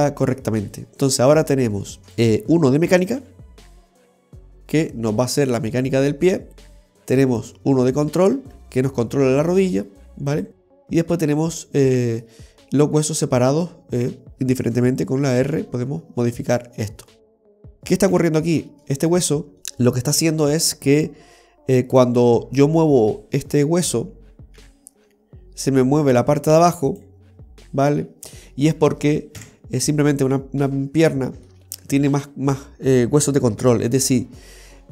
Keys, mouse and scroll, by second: 0.9-1.3 scroll down 2, 1.3 middle click, 2.1 right click, 3.3 g, 7.4 right click, 7.9 middle click, 8.4 g, 10.8 middle click, 11.9 middle click, 14.1 right click, 15.5 r, 16.1 r, 18.2 ctrl+z, 19.0 right click, 19.6 middle click, 21.9 middle click, 24.7 g, 28.6 middle click, 29.4 KP_3, 30.2-30.7 scroll up 4, 31.2 shift+middle click.